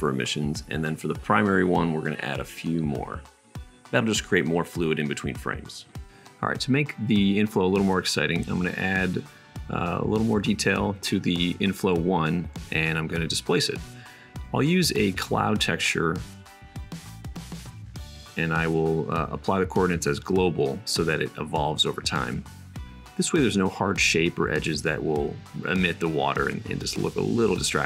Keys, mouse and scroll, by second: 1.1 middle click, 2.1 middle click, 3.1-4.7 middle drag, 5.2 super+s, 7.8-18.4 middle drag, 19.7-27.8 middle drag.